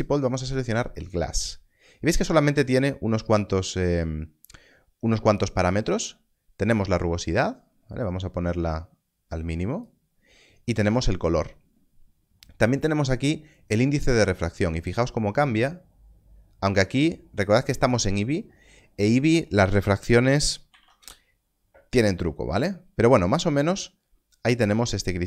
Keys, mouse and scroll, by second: 0.9 click, 6.7 click, 13.5 click, 20.0-20.7 typing, 21.0 Return.